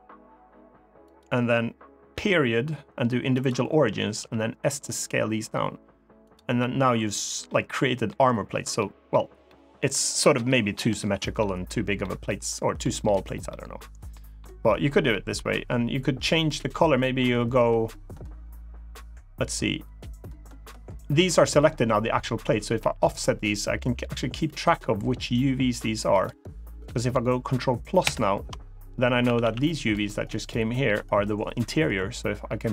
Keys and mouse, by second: 0.8 click, 3.9 s, 6.0 click, 6.3 middle click, 7.4 middle click, 8.5 middle click, 9.2 middle click, 10.1 middle click, 10.7 shift+middle click, 11.1 middle click, 11.7 middle click, 12.5 middle click, 13.2 middle click, 13.9 middle click, 14.8 middle click, 21.0 middle click, 22.5 g, 25.9 click, 27.8 ctrl+KP_Add, 29.0 a, 29.2 a, 29.5 b, 32.2 g.